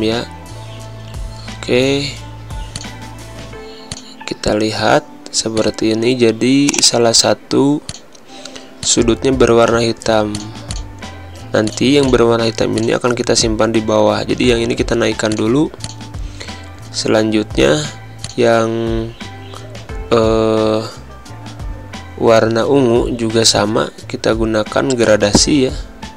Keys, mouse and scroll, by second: 18.3 click, 25.0 click.